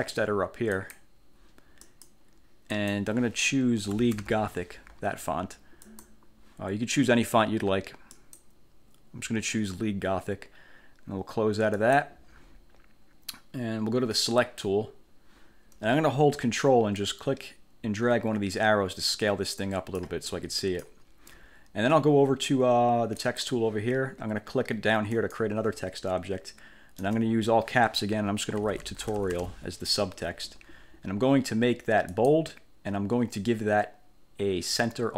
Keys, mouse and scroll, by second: 0.8 click, 1.9 click, 2.8 click, 3.6-4.7 typing, 5.9 click, 8.3 click, 11.9 click, 14.5 click, 17.1-20.3 ctrl+drag, 20.7 click, 23.3 click, 25.3 click, 27.1 Caps_Lock, 28.5-30.0 typing, 32.2 click.